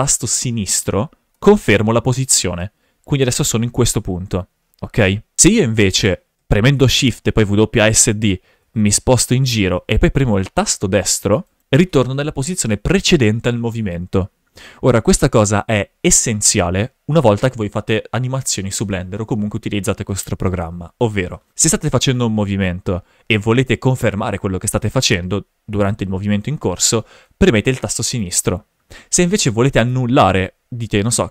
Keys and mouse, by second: 6.5 shift+f, 21.9 shift+f, 29.7 shift+f.